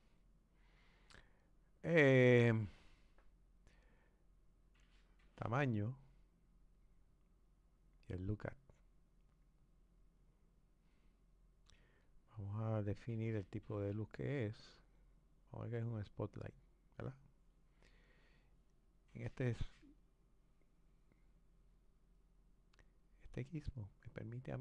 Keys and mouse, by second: 13.7 click, 16.1 click, 19.9 click, 24.3 click.